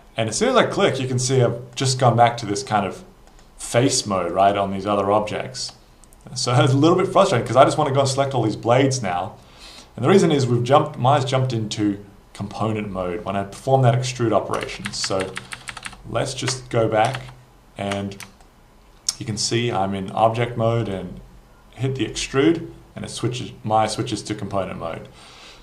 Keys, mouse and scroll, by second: 1.8 shift+click, 2.5 shift+click, 3.3 shift+click, 3.7 shift+click, 4.3 shift+click, 14.0 ctrl+z, 14.7 ctrl+z, 14.9 ctrl+z, 15.1 ctrl+z, 15.2 ctrl+z, 15.4 ctrl+z, 15.6 ctrl+z, 15.8 ctrl+z, 16.0 ctrl+z, 18.5 alt+click, 22.1 click.